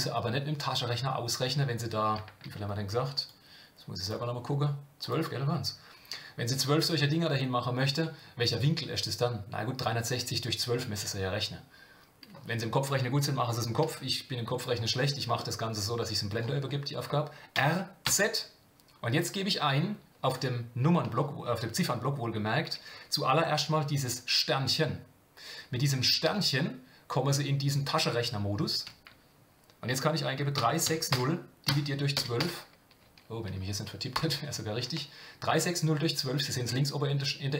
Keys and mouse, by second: 16.3 click.